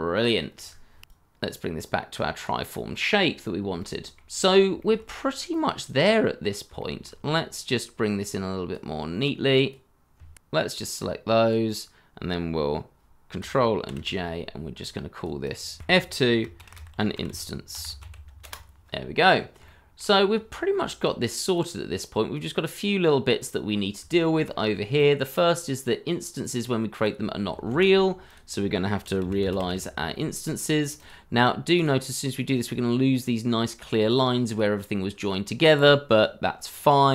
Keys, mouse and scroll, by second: 1.0 KP_3, 3.2 scroll down 1, 3.7 shift+middle click, 4.3 scroll down 1, 4.7 shift+middle click, 6.4 scroll up 1, 6.7 shift+middle click, 8.5 Escape, 10.3 ctrl+z, 13.8 ctrl+j, 15.5 double click, 15.8 F2, 16.5-18.0 typing, 18.4 Return, 19.3 scroll down 1, 19.6 shift+middle click, 23.6 scroll up 1, 24.0 shift+middle click, 24.5 scroll up 1, 26.5 scroll up 1, 27.7 shift+a, 29.0-29.9 typing.